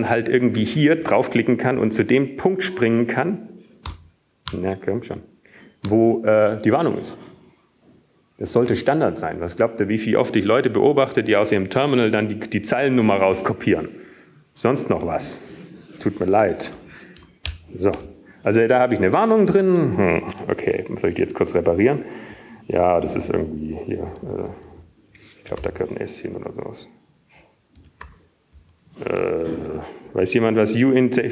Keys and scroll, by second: 7.0 Return, 22.7 typing, 26.5 Left, 26.9-29.0 typing, 30.5-31.3 typing.